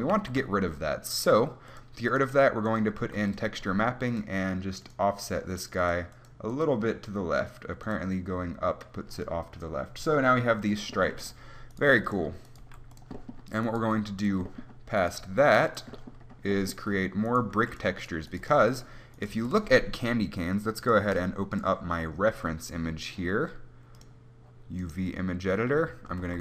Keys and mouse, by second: 0.4 shift+a, 3.3-10.1 drag, 3.3 g, 11.2-13.9 drag, 12.2 g, 12.4 middle click, 12.9 g, 14.1 g, 15.5 g, 16.5-17.5 drag, 17.8 g, 18.7 g, 19.6 g, 25.2-26.4 drag.